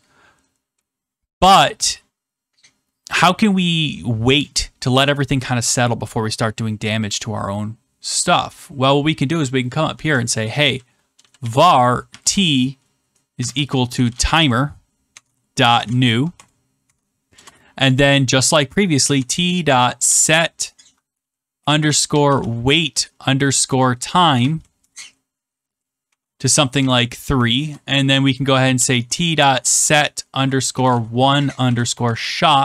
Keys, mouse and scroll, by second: 8.9 click, 10.9-16.3 typing, 16.8 Tab, 17.3 Return, 19.1-25.4 typing, 26.5-27.2 typing, 27.5 Return, 29.0-32.6 typing.